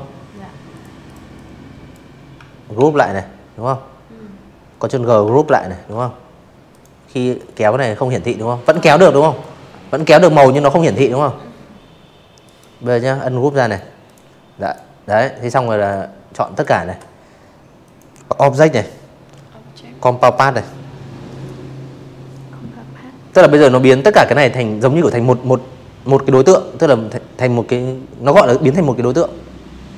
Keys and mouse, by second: 2.3 ctrl+g, 3.6 click, 4.3-5.6 drag, 6.3-7.4 drag, 7.8 v, 9.3 right click, 10.5 click, 11.0 click, 11.5 click, 12.8 click, 14.8 click, 29.5 click.